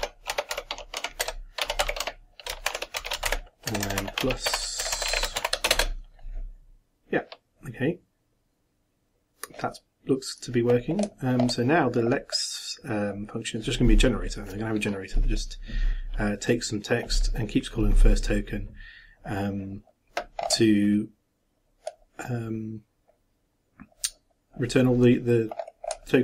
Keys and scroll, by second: 2.4-5.4 typing, 5.7 shift+Return.